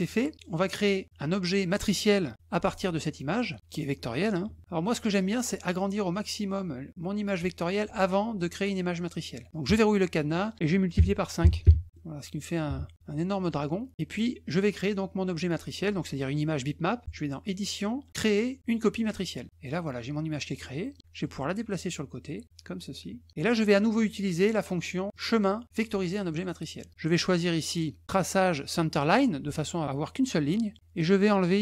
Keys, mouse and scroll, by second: 0.3 middle click, 0.7 click, 9.7 click, 10.3 click, 11.9 middle click, 13.1 middle click, 13.8 click, 17.0 click, 19.0 click, 20.6 middle click, 21.2-23.3 drag, 25.1 click, 26.3 click, 27.0 click.